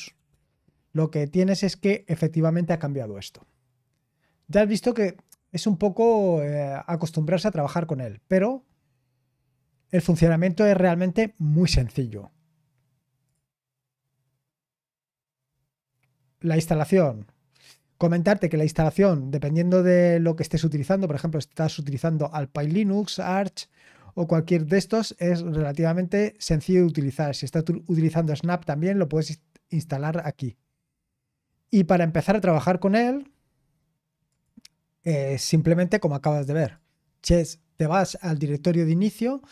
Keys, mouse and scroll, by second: 0.0-0.6 typing, 1.9-5.2 drag, 1.9 typing, 6.9-9.1 drag, 9.1-11.8 scroll down 3, 11.8-13.2 scroll up 1, 13.2 click, 15.4-16.3 scroll down 1, 16.3-19.9 scroll up 2, 19.9-21.2 scroll down 3, 21.2-22.6 scroll up 2, 22.6-30.6 drag, 30.6-34.3 scroll down 4, 34.3 click, 35.4-36.0 scroll down 1, 36.7-39.5 drag.